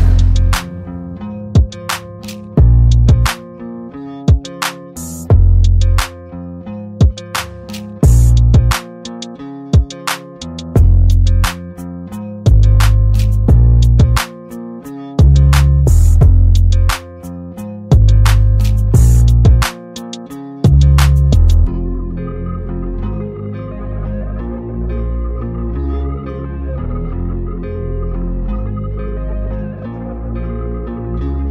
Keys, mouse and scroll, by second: 0.0 ctrl+g, 2.6-5.1 alt+drag, 6.2 ctrl+d, 8.5 click, 9.7 right click, 10.4 click, 12.5 Delete, 13.7 click, 16.5 click, 17.5 click, 18.0 click, 18.9 click, 20.8-23.1 drag, 26.5-29.3 drag.